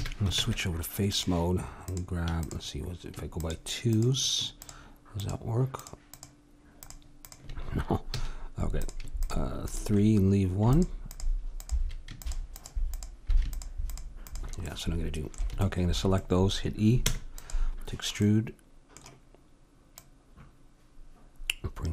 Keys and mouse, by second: 0.3 ctrl+Tab, 1.8-11.4 drag, 8.1 a, 14.7-16.2 middle drag, 17.1 e, 18.2-20.0 middle drag, 20.0-21.9 drag.